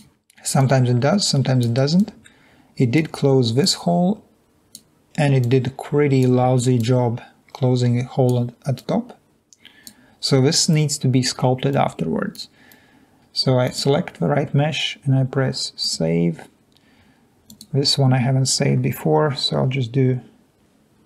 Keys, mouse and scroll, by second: 0.4 click, 1.7 click, 3.2 click, 5.3-6.6 drag, 12.4 click.